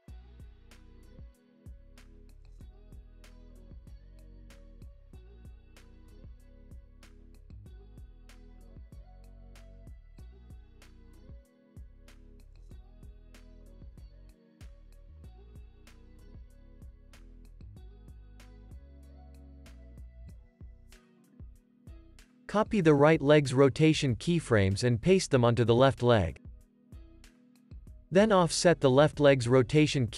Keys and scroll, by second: 4.4 super+s, 4.8 space, 10.0 space, 12.1 alt+w, 14.6 alt+w, 16.3 space, 20.1 space, 20.3 super+s, 21.2 space, 23.2 super+c, 26.7 super+v, 26.9 super+s, 28.7 alt+q.